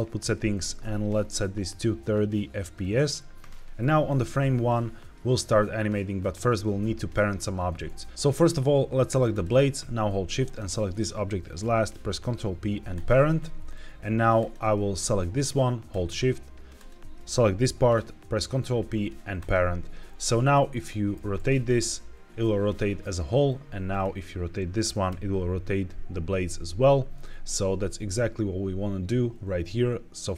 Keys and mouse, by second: 1.6-2.8 drag, 10.4 shift+click, 12.0 ctrl+p, 16.6 shift+click, 18.2 ctrl+p, 20.3 click, 21.0 r, 21.2 z, 23.1 Escape, 23.8 click, 24.7 r, 25.0 y, 26.3 Escape.